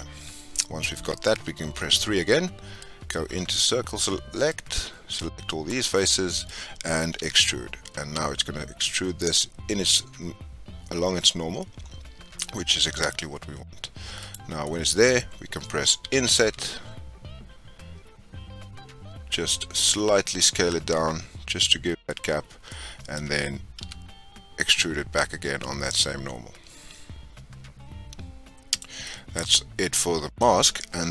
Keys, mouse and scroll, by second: 1.6 3, 2.8-6.0 drag, 6.0-7.1 middle drag, 7.1 e, 14.6-16.0 middle drag, 16.0 i, 22.6-23.7 middle drag, 23.7 e, 29.0-31.1 middle drag.